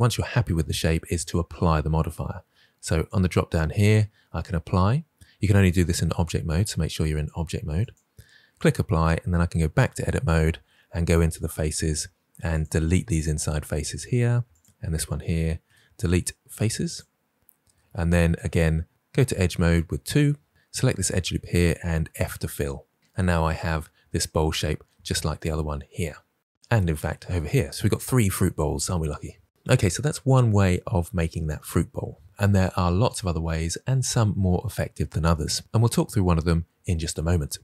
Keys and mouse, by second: 2.8-7.9 drag, 9.6 Tab, 11.7 3, 14.5 shift+click, 15.6 Delete, 18.5 2, 22.0 f, 23.0 Tab.